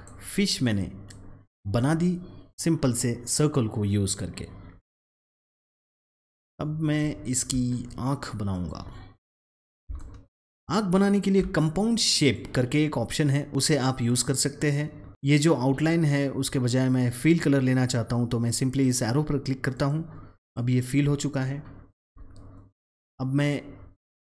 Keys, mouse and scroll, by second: 6.0 click, 7.0-7.3 alt+scroll up 1, 8.4 click, 9.9-12.1 alt+shift+drag, 19.6 click, 21.3 alt+scroll up 1, 22.9 click.